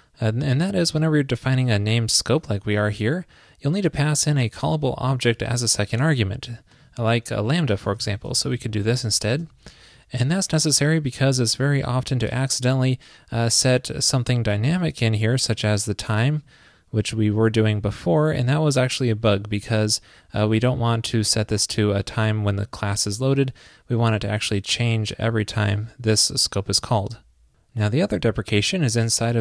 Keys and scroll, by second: 8.7 super+Right, 26.9 super+s.